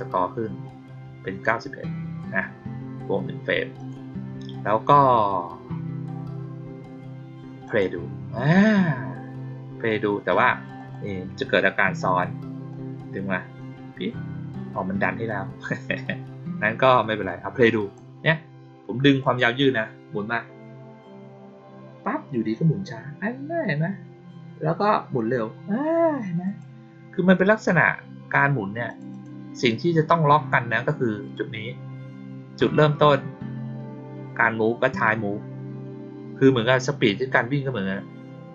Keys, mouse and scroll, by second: 3.7 click, 7.6 click, 10.7 click, 11.8 click, 12.6-13.5 drag, 14.7-15.6 drag, 17.2 click, 19.1 click, 26.4 click, 28.8 click, 29.0 click.